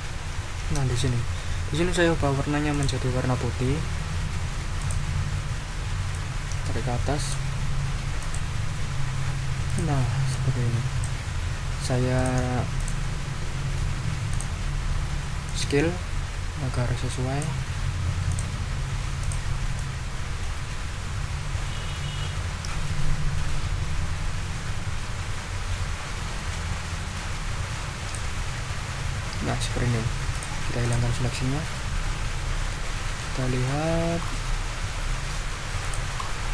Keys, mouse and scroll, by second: 0.1 ctrl+v, 2.7 click, 4.8 click, 6.1-7.5 drag, 8.2 click, 9.7 click, 10.3 click, 12.2 click, 12.8 click, 14.3 click, 15.4-17.6 drag, 18.3 click, 19.2 click, 19.7-28.3 drag, 30.3 click, 30.8 click, 33.4-34.4 ctrl+scroll up 6, 35.0 ctrl+scroll down 2, 35.8 ctrl+click, 36.1 ctrl+scroll up 2.